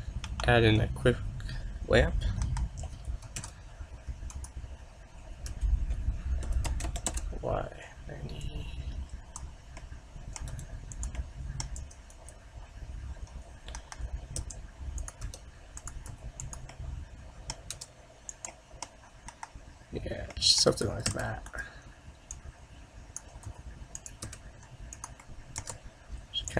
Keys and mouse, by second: 0.4 KP_1, 2.5 KP_7, 3.5 shift+a, 5.6 r, 8.5-10.4 drag, 10.0 middle click, 10.6 s, 11.9 g, 13.8 KP_7, 14.5 g, 15.3 r, 16.2 s, 16.9-18.8 middle drag, 17.8 r, 19.4 KP_0, 21.2 shift+d, 22.4-24.3 drag, 23.5 s, 24.4 r, 25.3 middle click, 25.7 r.